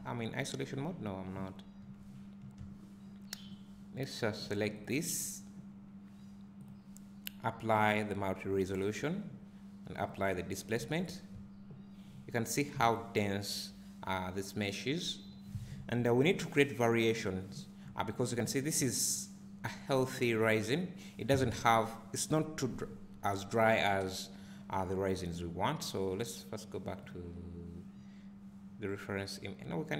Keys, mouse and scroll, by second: 0.0-0.4 scroll down 1, 1.0 scroll up 1, 1.9 `, 5.2 click, 8.4 click, 12.1 scroll up 1, 12.7 `, 17.5-17.9 scroll down 2, 17.9 `.